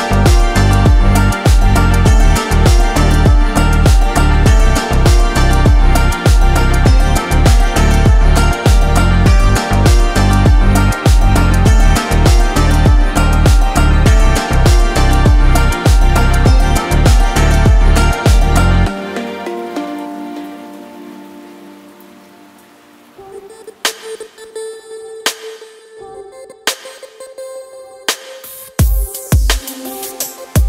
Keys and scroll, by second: 6.1 KP_1, 9.2 ctrl+b, 24.6 KP_1, 27.4 e, 28.4 Escape.